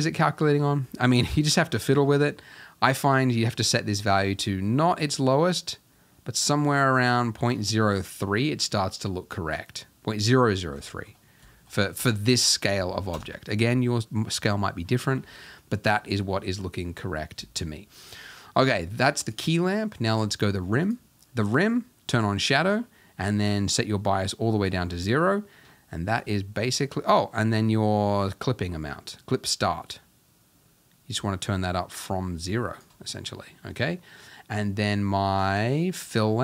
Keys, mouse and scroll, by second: 2.2-5.0 drag, 7.8-10.6 middle drag, 10.6 scroll down 1, 10.9-11.8 shift+middle drag, 11.8-13.1 scroll down 1, 13.1 KP_0, 14.4-15.3 scroll down 2, 15.3-16.5 scroll down 1, 16.5-17.1 scroll down 1, 17.1-17.8 scroll down 1, 17.8-18.4 scroll down 1, 18.4-19.2 scroll down 1, 19.2 click, 20.1 click, 22.1 click, 23.9-29.2 drag, 35.5 click, 36.0 click.